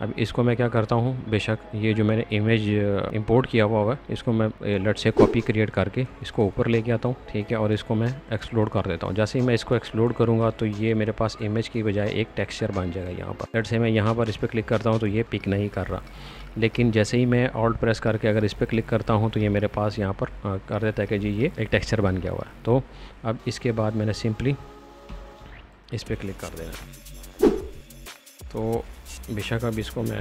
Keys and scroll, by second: 0.8 Escape, 3.0 m, 7.2 space, 10.4 b, 23.2 space, 25.0 n, 25.3 b, 28.6 space.